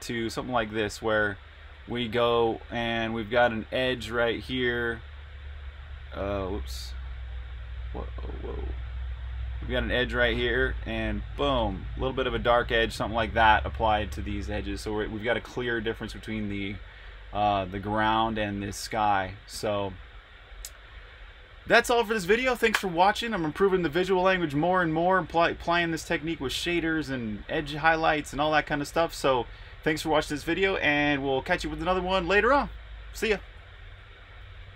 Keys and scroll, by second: 3.7 super+-, 5.4 super+s, 10.3 s.